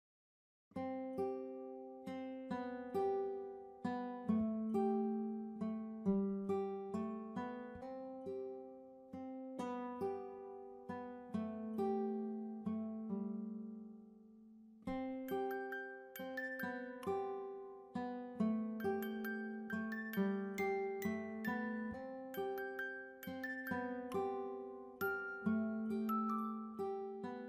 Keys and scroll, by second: 0.0-1.2 typing, 7.2 typing, 8.9 ctrl+-, 9.4 ctrl+-.